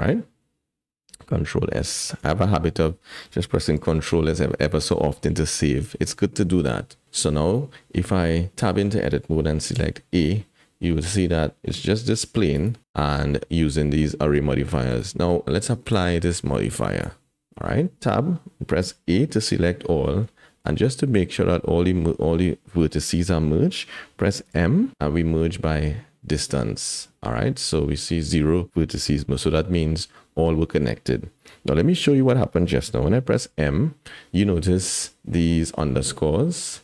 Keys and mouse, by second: 1.3 ctrl+s, 2.0 shift+click, 3.8 ctrl+s, 7.0 middle click, 8.5 Tab, 9.7 a, 10.2-11.2 middle drag, 11.9 g, 14.9 click, 15.4 Tab, 16.0 click, 17.9 Tab, 18.8 a, 19.4 click, 20.4 shift+click, 24.4 m, 29.2 shift+click, 33.3 m.